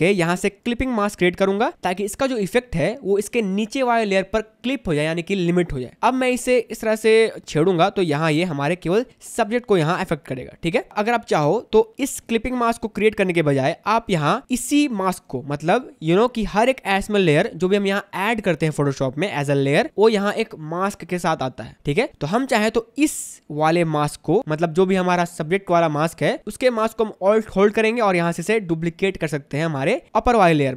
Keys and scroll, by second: 9.5 ctrl+z, 10.9 space.